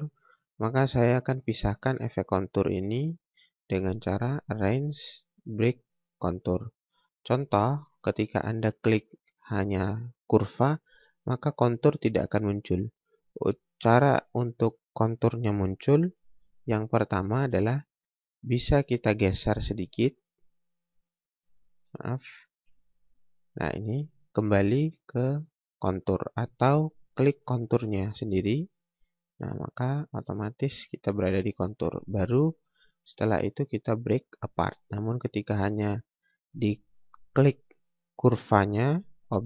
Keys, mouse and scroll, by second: 0.5 scroll up 1, 2.8 scroll down 1, 3.1 scroll up 1, 4.2 click, 6.6 click, 7.5 scroll down 1, 7.9 scroll up 1, 8.6 click, 12.0 scroll up 1, 12.9 scroll down 1, 19.6 click, 22.6 ctrl+z, 26.1 click, 26.7 scroll up 1, 28.7 scroll down 1, 29.8 scroll up 1, 31.8 scroll down 1, 32.1 scroll up 1, 33.0 click, 38.8 scroll down 1, 39.2 scroll up 1.